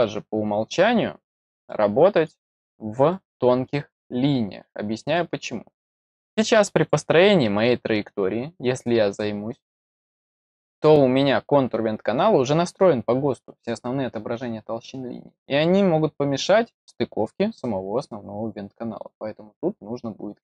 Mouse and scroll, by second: 1.6 middle click, 2.5 scroll up 2, 3.0-3.6 middle drag, 4.1-4.9 scroll up 3, 5.1 middle click, 6.7 click, 8.4-9.8 scroll up 11.